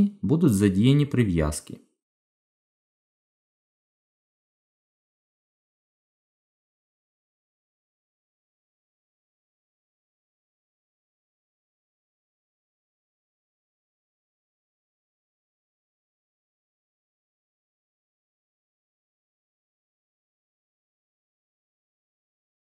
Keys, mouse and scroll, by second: 6.3 g, 17.2 r.